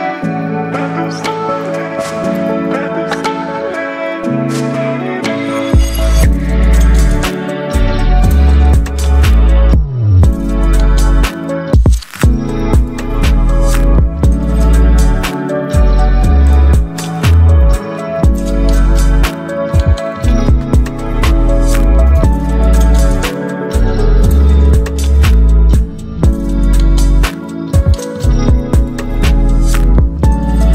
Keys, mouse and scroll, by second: 0.6 ctrl+t, 2.7-7.5 alt+drag, 9.5 ctrl+g, 10.2 ctrl+t, 11.5-18.4 drag, 18.4-21.6 alt+drag, 24.6 click, 25.5-27.5 typing, 30.4 t.